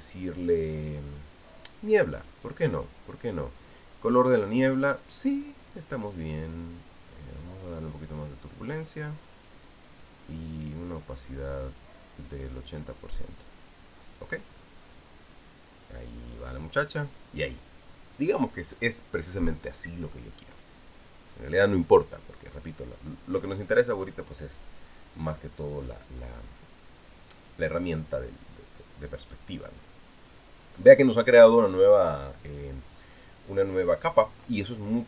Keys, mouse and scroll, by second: 2.4 click, 8.2-10.5 drag, 11.9-14.1 drag, 15.3 click.